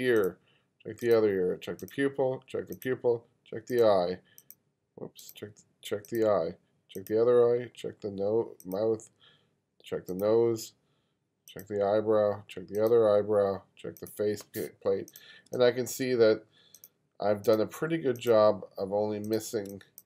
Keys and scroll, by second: 15.5 space, 19.7 space.